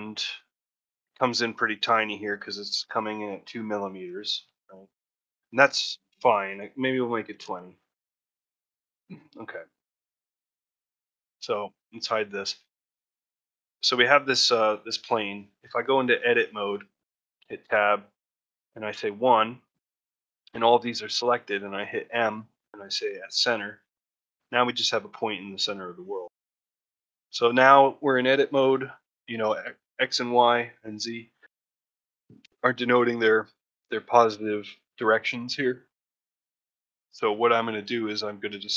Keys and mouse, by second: 0.5 middle drag, 0.9 ctrl+middle click, 1.3 shift+middle drag, 6.4-9.1 drag, 11.7 click, 12.1-12.7 middle drag, 12.9 shift+middle drag, 13.2 ctrl+middle click, 14.4-15.1 middle drag, 15.3-15.8 alt+middle drag, 17.1 Tab, 18.8 1, 19.4 shift+middle click, 20.7 shift+middle click, 23.2 m, 23.8 middle click, 24.2 ctrl+middle click, 25.2-26.8 middle drag, 27.0 shift+middle click, 27.4 ctrl+middle click, 34.7 middle click, 35.7-36.7 alt+middle drag, 36.9 shift+middle click, 37.3 middle click, 38.2 shift+middle click, 38.6 ctrl+middle click.